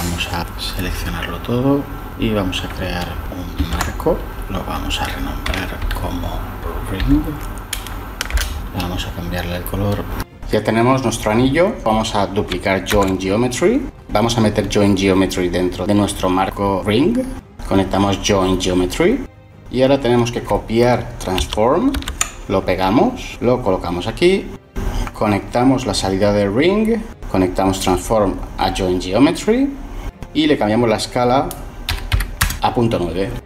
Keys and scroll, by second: 2.7 ctrl+j, 4.3 F2, 5.9-7.1 typing, 8.4 Return, 13.1 shift+d, 21.1 ctrl+c, 21.7 ctrl+v, 31.8-32.5 typing.